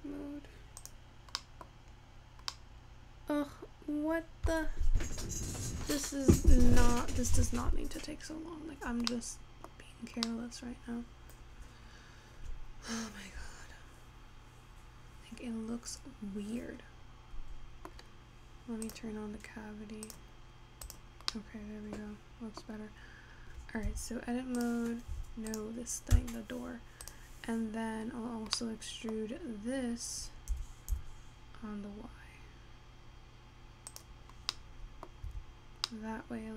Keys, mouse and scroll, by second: 0.9-2.1 drag, 2.1-2.8 scroll up 4, 2.8-6.0 middle drag, 6.0-6.7 scroll down 3, 8.8-10.5 scroll up 3, 10.5-13.8 middle drag, 19.3 click, 22.7 middle click, 23.2 scroll up 4, 23.5-24.2 scroll down 3, 24.2 Tab, 27.6 click, 29.1-31.8 middle drag, 31.8 e, 35.5 Tab, 36.1-36.5 middle drag.